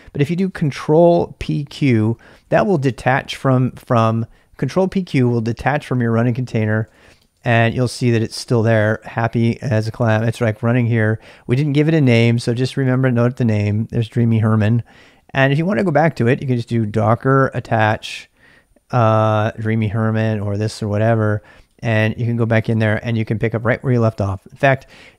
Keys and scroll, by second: 1.4 ctrl+p, 1.8 ctrl+q, 2.5-3.3 typing, 6.3-8.0 typing, 16.1-17.9 typing, 22.7 Return, 23.7-25.1 typing.